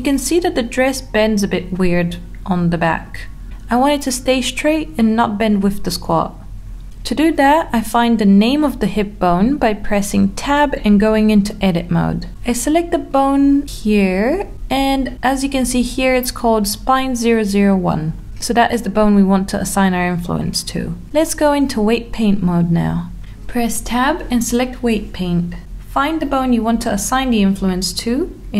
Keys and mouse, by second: 1.6 click, 2.0-3.2 middle drag, 4.2-4.6 middle drag, 5.3 Tab, 7.2 Tab, 8.7 middle click, 9.7 shift+middle click, 11.7 middle click, 22.9 Tab.